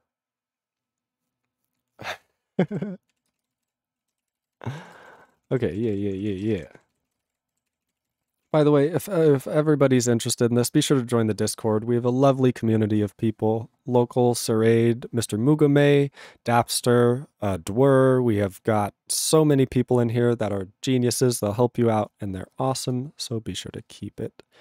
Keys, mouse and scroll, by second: 2.7 ctrl+s, 3.1 ctrl+e, 3.3 ctrl+space, 3.4 ctrl+a, 3.5 ctrl+g, 3.6 ctrl+e, 4.0 ctrl+a, 4.1 ctrl+space, 4.2 ctrl+e, 4.3 ctrl+n, 4.5 ctrl+g, 4.7 ctrl+p, 4.8 ctrl+a, 4.9 ctrl+p, 5.0 ctrl+space, 5.1 ctrl+n, 5.2 ctrl+e, 5.3 ctrl+g, 5.4 ctrl+p, 5.5 ctrl+a, 5.6 ctrl+p, 5.7 ctrl+space, 5.7 ctrl+n, 5.9 ctrl+e, 5.9 ctrl+g, 6.1 ctrl+p, 6.4 ctrl+a, 6.5 ctrl+space, 6.5 ctrl+e, 6.6 ctrl+g, 6.9 ctrl+s, 7.1 ctrl+a, 7.2 ctrl+space, 7.2 ctrl+e, 7.3 ctrl+g, 7.7 ctrl+s, 7.8 ctrl+a, 7.9 ctrl+space, 8.0 ctrl+e, 8.0 ctrl+n, 8.2 ctrl+g, 8.4 ctrl+p.